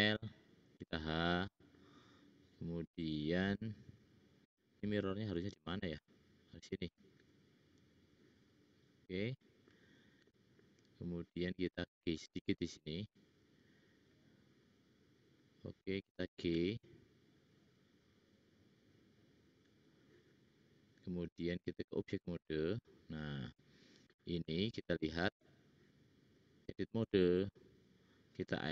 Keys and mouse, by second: 0.8 h, 7.1 click, 11.6 click, 13.0 `, 15.2 click, 15.2 middle click, 15.2 right click, 16.5 g, 20.9-23.4 drag, 20.9-23.4 middle drag, 20.9-23.4 right drag, 25.2 click, 25.2 middle click, 25.2 right click, 25.4 click.